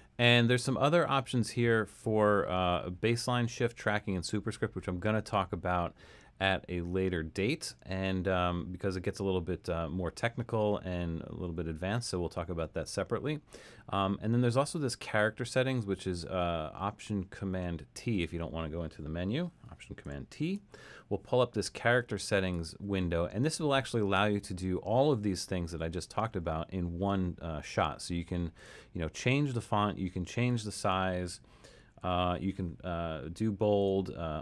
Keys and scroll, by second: 20.0 alt+super+t, 31.6-32.5 typing.